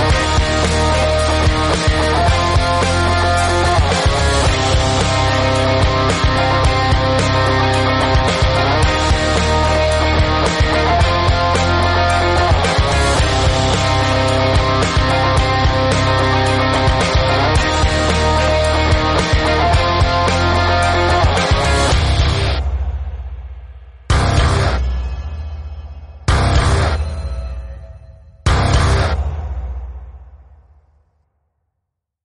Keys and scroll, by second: 0.4 space, 1.2 ctrl+F1, 3.2 ctrl+g, 3.6 Tab, 3.9 Tab, 5.6-7.1 typing, 5.9 Return, 13.4 x, 14.2 ctrl+v, 17.8 space, 19.3 space, 21.3 space.